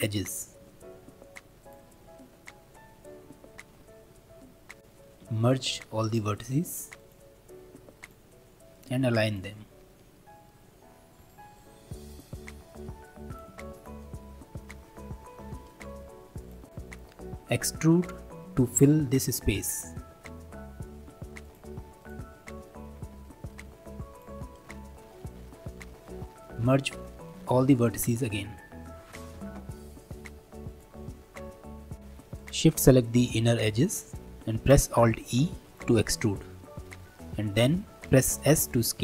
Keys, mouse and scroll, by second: 0.8 alt+e, 4.8 1, 5.2 a, 5.7 m, 8.0 click, 8.7 click, 9.3 shift+click, 10.2-11.2 middle drag, 11.2 g, 12.4 middle click, 13.3 click, 13.7 shift+click, 14.0-15.4 middle drag, 15.4 g, 16.7 click, 17.8-20.9 middle drag, 20.9 3, 21.1 2, 21.4 click, 22.0 shift+click, 22.3 middle click, 23.1 e, 24.9-28.0 middle drag, 29.2 1, 29.4 a, 30.2 m, 31.4-31.9 scroll down 1, 31.9 shift+middle click, 31.9 2, 32.4 alt+click, 33.5-34.9 middle drag, 34.9 alt+e, 38.6 s.